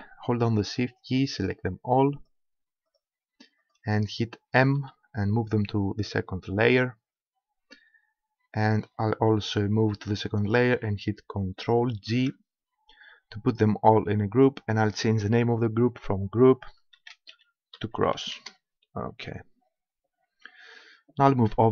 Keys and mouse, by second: 0.7-5.4 right drag, 4.8 m, 10.4-12.4 drag, 12.1 ctrl+g, 14.8-16.6 drag.